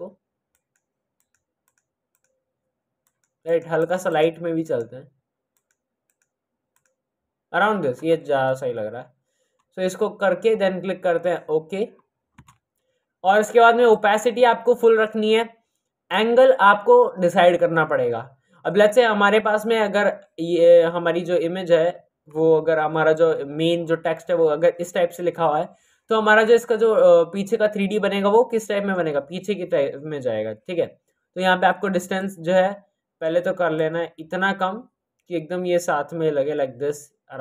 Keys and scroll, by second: 12.3 Return.